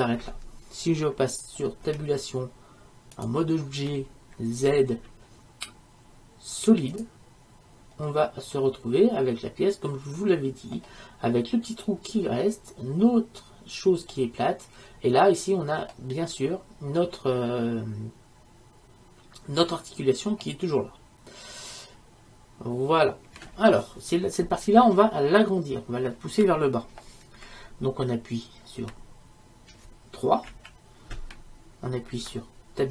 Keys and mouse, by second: 2.0 Tab, 4.8 z, 8.2-10.0 middle drag, 14.2-22.9 middle drag, 30.6 KP_3.